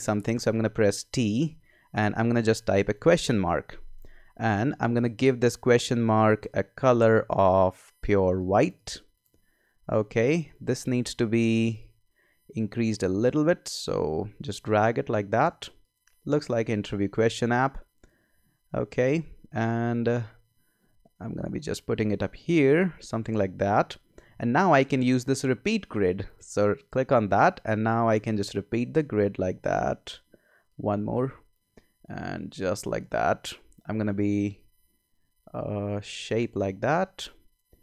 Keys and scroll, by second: 0.3 t, 2.9 shift+/, 4.4 super+a, 19.8 v.